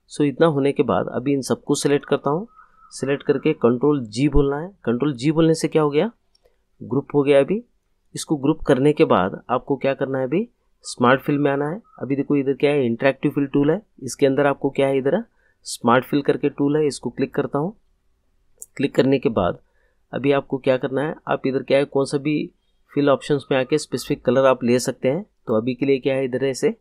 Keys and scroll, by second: 4.2 ctrl+g.